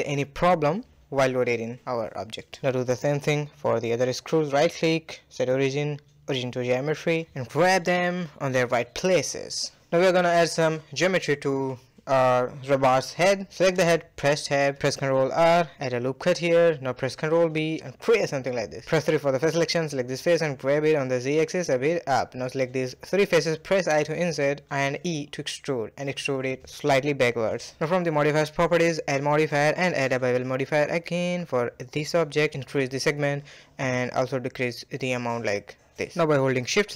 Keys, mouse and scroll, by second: 0.6-1.1 middle drag, 1.1-1.6 scroll down 1, 1.6 drag, 2.1 shift+click, 2.4-4.4 right drag, 4.4 g, 5.3-6.1 middle drag, 6.1 a, 6.3 a, 6.6-8.3 middle drag, 8.3-8.7 scroll down 2, 8.7-9.4 shift+middle drag, 9.4 scroll down 1, 9.6-11.0 middle drag, 11.0 scroll down 1, 11.2-13.6 middle drag, 13.6 click, 13.9 Tab, 14.2-15.5 middle drag, 15.5 ctrl+r, 16.6 ctrl+b, 18.0 click, 18.8 g, 20.9 middle click, 21.5 click, 21.9 shift+click, 22.2 shift+click, 22.7 i, 24.4 e, 25.1-25.6 scroll up 3, 25.6 middle click, 26.6 Tab, 28.8-36.2 drag.